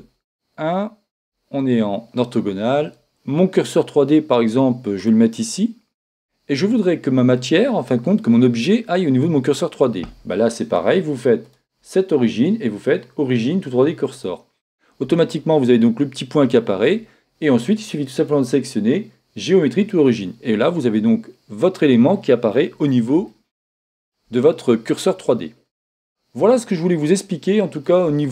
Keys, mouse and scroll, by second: 0.2 KP_1, 1.2 KP_5, 1.5 KP_5, 5.1-6.8 drag, 11.4-13.2 drag, 18.1-20.0 drag, 23.3-25.0 middle drag, 27.0-28.3 middle drag.